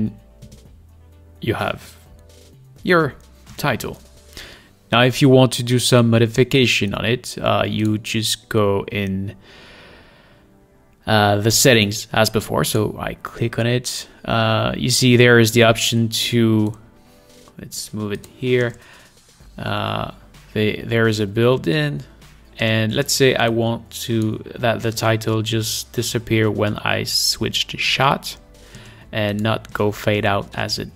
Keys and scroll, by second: 0.6 space, 3.7 space, 18.9 space, 22.9 space, 25.2 space, 29.1 space, 30.0 space.